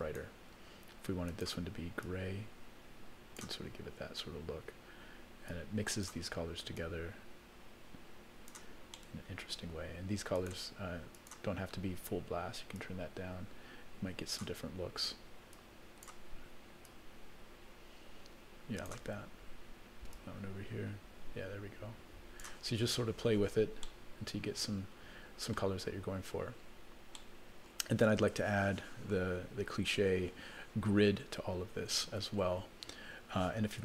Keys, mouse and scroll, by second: 0.0 click, 1.3 click, 5.5 click, 6.8-8.6 drag, 8.9 middle click, 10.4 click, 11.1 click, 15.5 click, 16.8-19.0 drag, 20.1-22.4 drag, 23.8-25.6 middle drag, 25.8 scroll up 1, 26.5 scroll down 1, 27.1 middle click, 29.7 scroll up 1, 31.6-31.9 scroll down 2, 31.9 middle click.